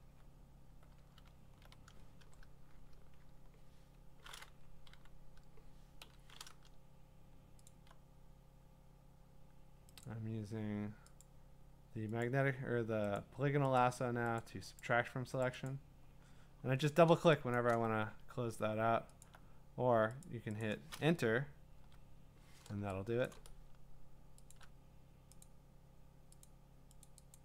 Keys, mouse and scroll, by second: 3.5-4.1 scroll, 4.8 q, 6.0 l, 7.7 alt+click, 10.0 click, 11.2 click, 12.2 click, 13.2 click, 13.8 click, 14.4 click, 14.8 click, 15.4 click, 15.7 click, 17.6 click, 17.7 click, 19.2 alt+click, 19.6 alt+click, 20.2 click, 20.7 click, 21.8 Return, 23.3 click, 24.5 shift+click, 25.4 click, 26.4 click, 27.1 click, 27.3 click.